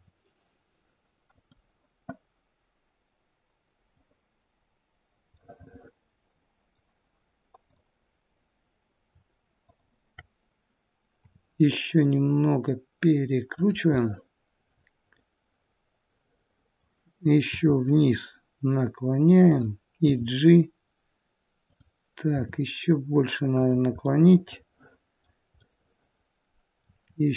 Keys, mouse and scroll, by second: 3.8 click, 5.3 middle click, 7.6 click, 9.5 shift+click, 11.2 r, 13.9 middle click, 17.4 r, 20.1 g, 22.2 r, 24.0 middle click, 25.5 middle click, 26.8 r.